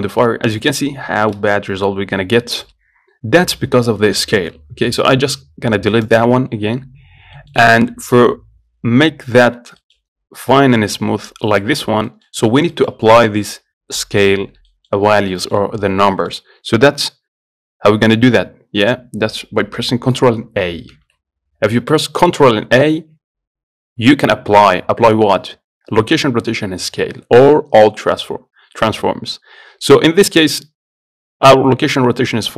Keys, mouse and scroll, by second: 0.7 shift+middle click, 1.2-1.5 scroll up 1, 1.5 shift+middle click, 2.4-2.8 scroll down 1, 2.8-5.5 shift+middle drag, 6.3 click, 6.8-7.6 scroll down 1, 7.6-15.4 shift+middle drag, 15.4-15.7 scroll up 1, 15.7-21.2 shift+middle drag, 21.2 ctrl+a, 22.5 ctrl+a.